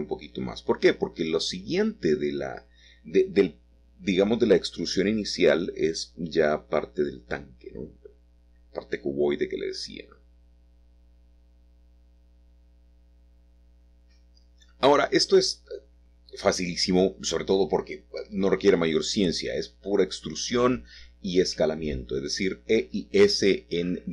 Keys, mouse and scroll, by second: 0.7 click, 3.0 click, 5.6 click, 9.8 click, 10.2-12.8 middle drag, 13.0 middle click, 16.6 Escape, 17.7 ctrl+z, 18.0 ctrl+z, 22.3 shift+middle click, 22.9 middle click.